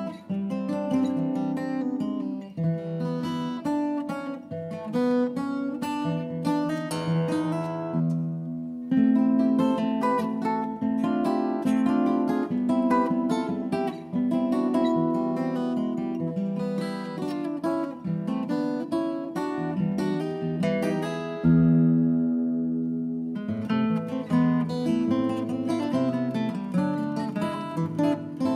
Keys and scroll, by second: 2.0 ctrl+d, 6.8 shift+Up, 6.8 shift+Up, 7.2 shift+Left, 7.4 shift+Up, 7.8 shift+Down, 7.9 shift+Down, 9.5 r, 10.4 Up, 10.5 Up, 11.8 space, 12.1 ctrl+d, 13.1 Right, 14.0 Right, 20.3 2, 20.4 Return.